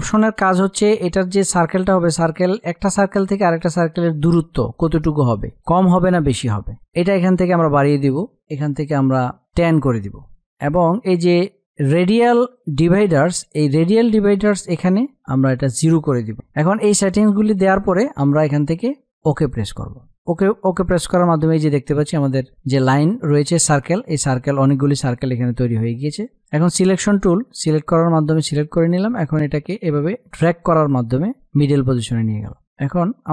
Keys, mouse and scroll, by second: 7.1-8.9 drag, 14.7-16.0 drag, 16.7-18.9 drag, 26.1-32.3 drag.